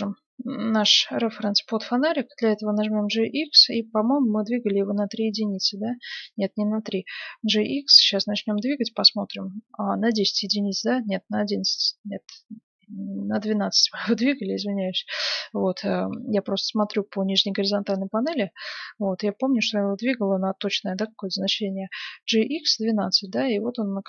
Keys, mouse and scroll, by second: 3.0 g, 7.1 g, 23.7 middle click.